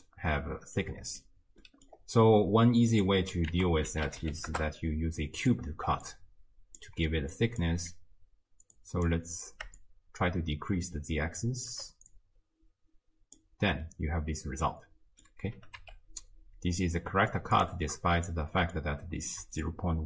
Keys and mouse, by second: 0.8 click, 1.6 middle drag, 3.0 click, 3.6 ctrl+a, 6.1 click, 7.4-7.7 drag, 8.8 click, 9.8-11.7 shift+drag, 12.1-13.4 drag, 13.9-15.3 middle drag, 15.6 r, 18.3 middle click, 19.7-20.0 shift+drag.